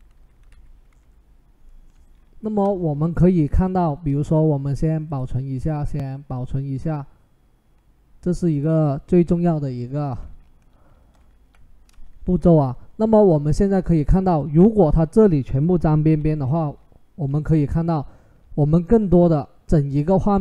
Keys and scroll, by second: 0.3 Left, 0.8 Up, 15.8 ctrl+h.